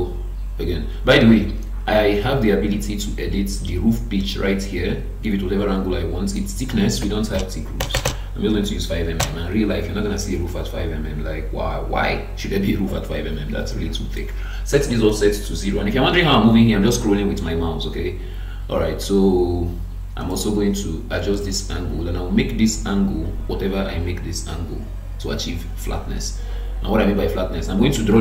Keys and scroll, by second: 7.8 BackSpace, 9.2 Return.